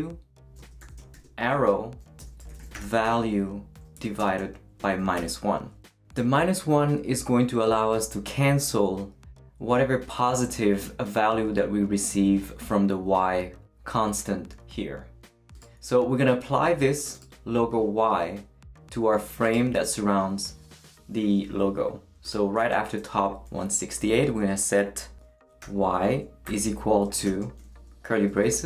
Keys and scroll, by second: 0.0-1.1 typing, 2.2-3.3 typing, 25.6 y, 26.4 =, 27.2 shift+=, 27.2 shift+[, 28.4-28.6 typing.